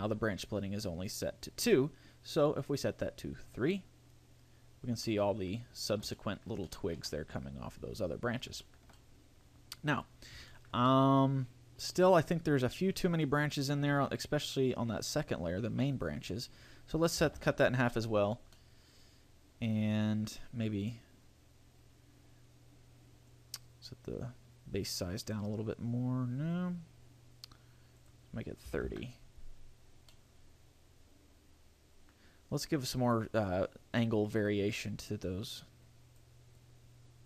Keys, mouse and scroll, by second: 3.6 click, 5.3 middle click, 5.9 scroll up 3, 6.3 shift+middle click, 6.9 shift+middle click, 7.3 scroll up 2, 7.8-8.8 scroll down 9, 8.8 shift+middle click, 9.1 middle click, 10.3 scroll up 2, 10.7 shift+middle click, 11.1 middle click, 16.1 click, 18.7 middle click, 23.5 click, 28.2 click, 30.3 middle click, 34.9 click, 36.7 click.